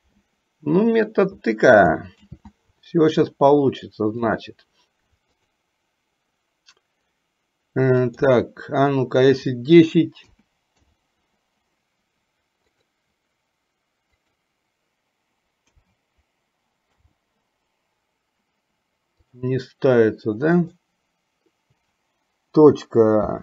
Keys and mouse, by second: 2.3 ctrl+z, 4.3-23.4 drag.